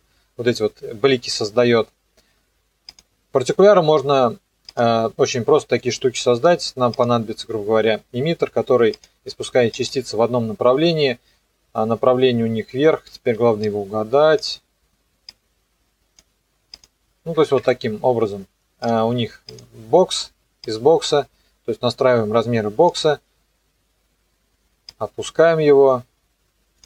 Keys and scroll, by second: 17.4 KP_9, 17.6 KP_Enter.